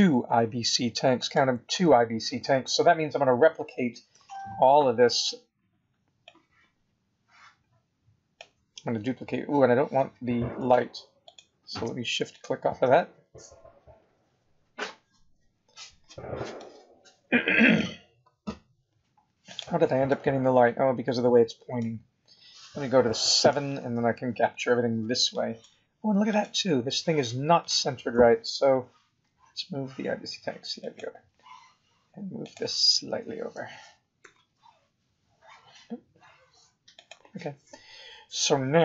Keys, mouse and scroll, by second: 4.1 b, 9.1-9.4 scroll down 3, 11.2 shift+click, 12.3 shift+click, 14.0-14.6 scroll up 4, 15.6-16.0 scroll down 4, 16.4 scroll down 1, 16.6 middle click, 19.4 click, 20.0 middle click, 21.9 scroll up 2, 23.2 KP_7, 25.0 b, 26.3 click, 26.9 scroll up 2, 28.1 g, 32.4 click, 33.5 g.